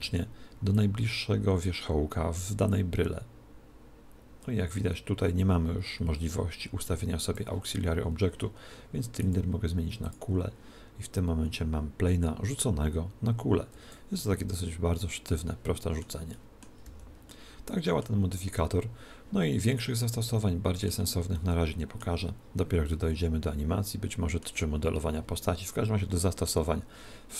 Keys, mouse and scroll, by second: 0.8 click, 9.2 click, 11.6 click, 14.2-15.9 middle drag, 16.3-19.1 middle drag, 16.9 z, 19.8-24.6 middle drag.